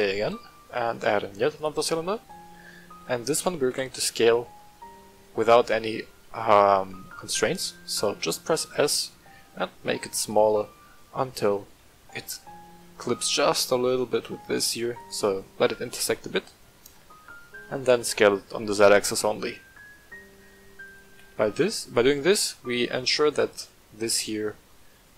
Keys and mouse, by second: 3.6 KP_7, 4.9-5.3 shift+middle drag, 6.8-7.3 shift+middle drag, 8.2 shift+middle drag, 9.0 s, 10.2 click, 10.9 shift+middle drag, 11.8 shift+middle drag, 12.8 shift+middle click, 13.3 s, 14.9 click, 16.1-16.5 middle drag, 17.2 middle click, 17.8 s, 18.3 z, 20.8 click, 21.0 g, 21.3 z, 21.9 click, 23.4-23.8 middle drag, 24.1 shift+middle drag, 25.0-25.1 shift+middle drag.